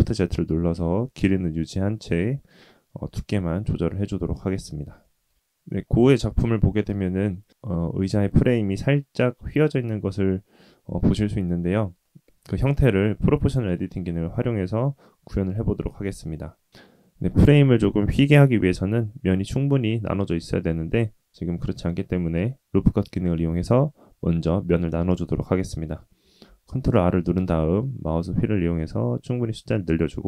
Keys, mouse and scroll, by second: 2.4-3.8 middle drag, 4.0-4.8 scroll up 3, 5.0 shift+middle click, 5.4-6.7 middle drag, 12.0 middle click, 12.8 Tab, 13.7 click, 16.2 click, 26.4 ctrl+r.